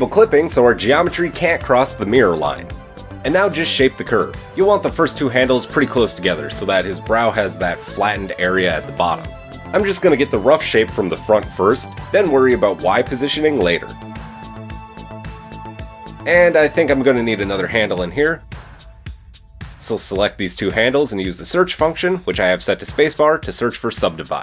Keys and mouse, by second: 1.0-3.8 middle drag, 3.8 right click, 3.8-7.6 shift+middle drag, 5.2 g, 9.4 g, 12.6 click, 12.8 g, 16.8 click, 17.1-19.9 middle drag, 19.9 drag, 20.2 shift+middle click, 20.4 shift+click, 20.5-24.4 shift+middle drag, 20.9 space.